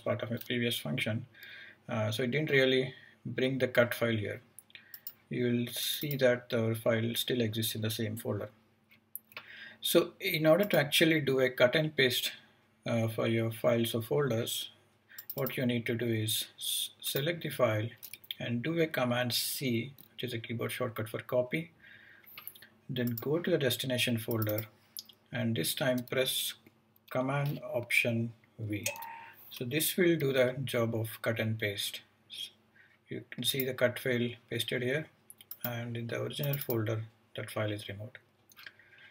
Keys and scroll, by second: 19.6 super+c, 28.6 alt+super+v.